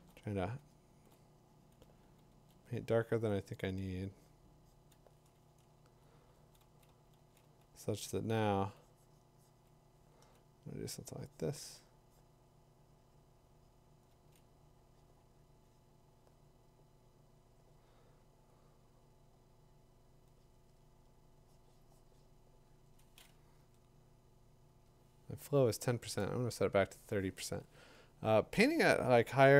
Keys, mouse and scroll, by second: 0.6 [, 1.8 [, 2.3 [, 6.0-9.1 drag, 6.3-7.4 typing, 9.9 ], 10.2 ], 14.1 [, 23.6 Tab, 24.7 Tab, 26.9 shift+3, 28.7 shift+3, 28.9 ], 29.3 ].